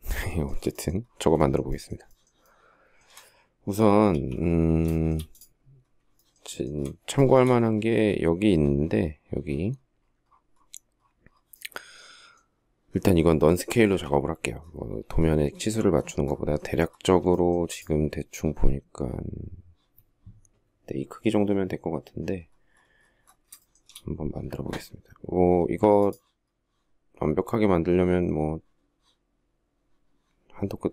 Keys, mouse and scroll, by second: 0.7 shift+middle click, 1.1 shift+middle click, 1.2 shift+double middle click, 1.4 shift+middle click, 1.8 shift+middle click, 3.5 alt+t, 4.3 shift+middle click, 5.5 shift+middle click, 5.9 shift+middle click, 6.0 shift+double middle click, 6.2 shift+scroll, 6.5 shift+middle click, 6.7 shift+middle click, 13.2 alt+t, 16.7 shift+middle click, 23.1 shift+middle click, 23.2-24.5 shift+scroll.